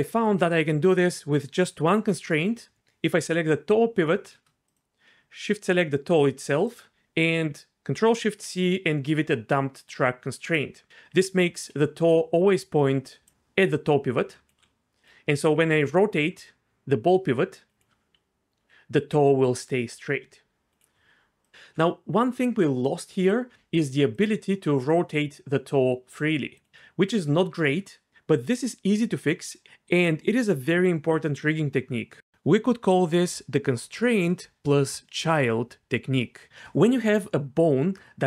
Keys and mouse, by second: 2.8 ctrl+z, 4.7 click, 10.6 ctrl+shift+c, 11.8-14.5 d, 12.1 click, 15.0 r, 15.6 r, 18.7 d, 18.7 r, 19.0 r, 20.7-21.5 right drag, 21.5 g, 24.1 click, 24.7 r, 26.6-27.6 right drag.